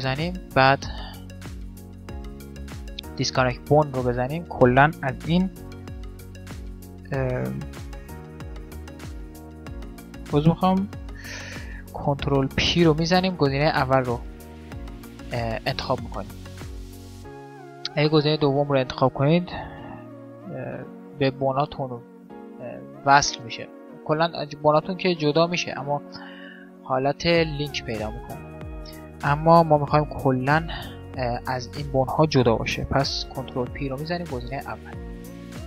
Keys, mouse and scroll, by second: 5.5 g, 7.9 alt+p, 9.7 g, 11.9 alt+p, 19.9 g, 24.0-26.9 right drag, 26.5 click, 27.3 middle click, 27.8 click, 27.8-32.4 right drag, 33.1 alt+p.